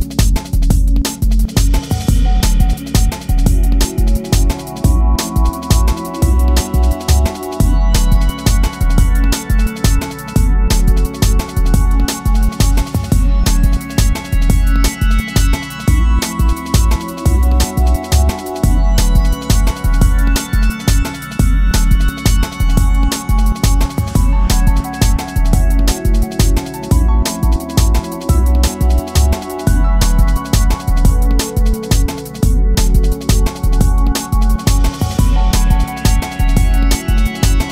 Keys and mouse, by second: 0.9-2.2 drag, 3.2-4.9 drag, 6.6-10.2 alt+drag, 11.1-18.2 alt+drag, 18.4-20.5 drag, 25.0 space, 26.8-30.9 alt+drag, 32.5 alt+click, 34.2 alt+click, 35.1 alt+click, 36.4 shift+right click, 37.0 shift+a.